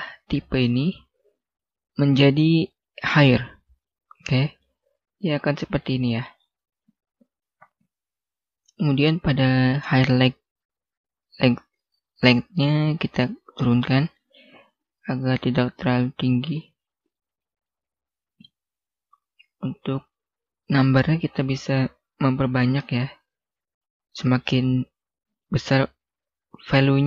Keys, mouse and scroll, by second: 2.4 click, 4.3 scroll down 1, 4.5 middle click, 5.3 scroll up 1, 5.7 middle click, 8.6 scroll down 1, 13.1 click, 16.5 scroll up 1, 17.1 middle click, 17.5 scroll down 1, 17.7 scroll up 1, 17.8-18.4 scroll down 1, 18.4 middle click, 19.6 click, 20.6 right click, 21.2 click.